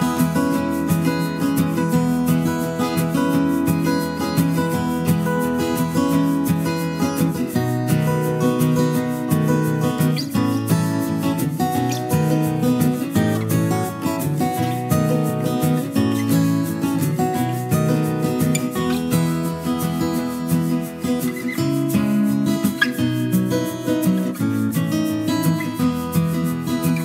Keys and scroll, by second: 19.1 ctrl+z.